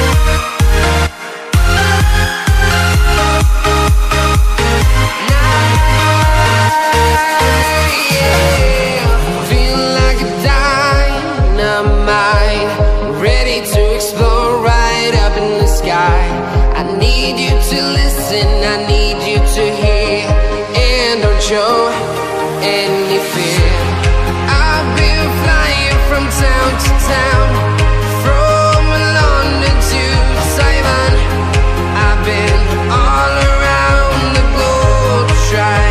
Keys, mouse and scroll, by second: 0.0-1.6 typing, 1.9 click, 4.7-9.0 typing, 9.3 click, 17.6 click, 17.8 space, 19.5 click, 20.3 t, 21.0 ctrl+shift+click, 24.0 Return, 25.9 click, 29.0 click, 30.9-32.9 typing, 34.1 click.